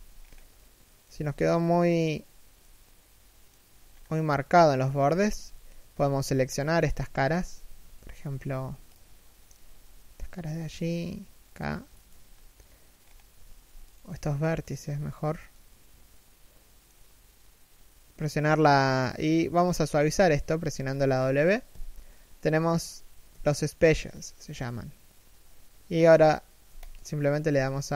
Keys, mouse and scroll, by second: 0.2 middle click, 2.2 middle click, 3.5-4.0 scroll down 1, 4.0 KP_3, 4.7 KP_1, 5.8 z, 6.0 scroll up 1, 7.1 z, 7.4 a, 7.7 b, 11.9-12.7 scroll down 1, 12.7-13.7 scroll up 1, 13.7 a, 14.0 alt+right click, 14.8-15.2 scroll down 1, 15.2 middle click, 21.4 w.